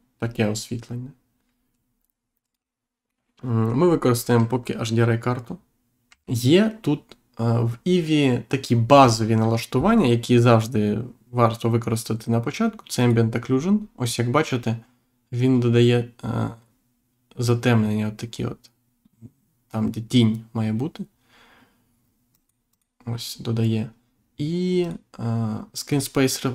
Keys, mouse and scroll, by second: 2.4 right click, 3.0 middle click, 6.0 Delete, 6.2 click, 12.9 click, 22.3 click, 24.8 click, 25.8 click.